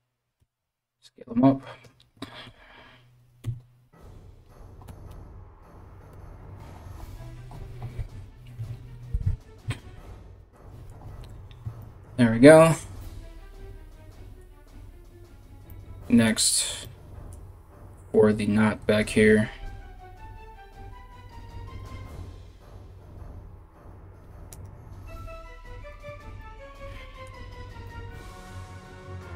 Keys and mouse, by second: 0.0 s, 3.1 KP_3, 4.5 g, 8.3 KP_1, 24.1 right click, 25.7 Tab, 28.5 Tab.